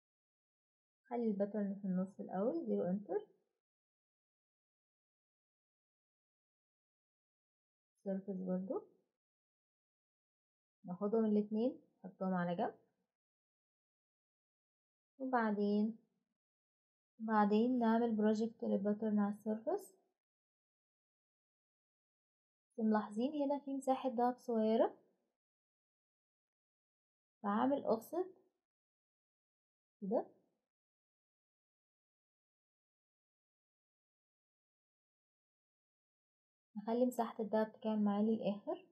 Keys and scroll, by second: 0.4 Escape, 6.2 0, 6.5 Return.